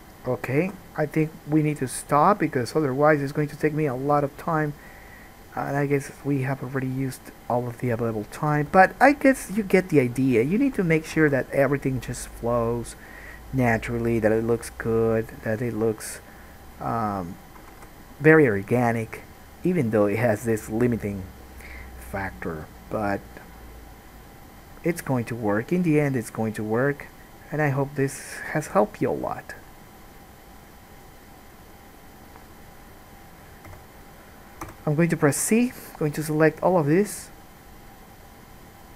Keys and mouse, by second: 0.8 alt+a, 2.7-8.2 drag, 2.7-8.2 middle drag, 2.7-8.9 right drag, 8.9 g, 11.4 alt+a, 13.8 middle click, 14.7 g, 17.8-26.1 alt+drag, 17.9 alt+a, 26.1 middle click, 33.9 3, 34.9 c.